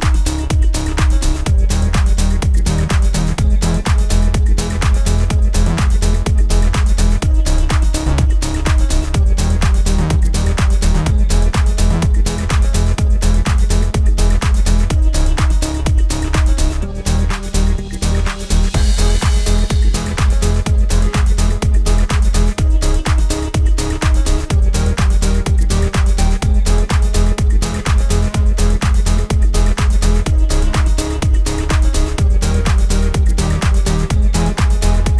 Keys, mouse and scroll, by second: 18.1 click, 25.0 click, 26.0 space, 27.2 click, 28.2 alt+scroll down 1, 30.1 click, 32.3 space, 32.8 click.